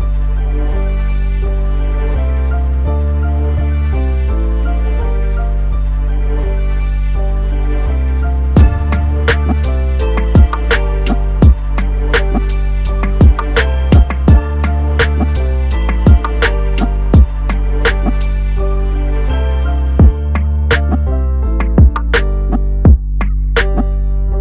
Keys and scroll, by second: 2.8 ctrl+t.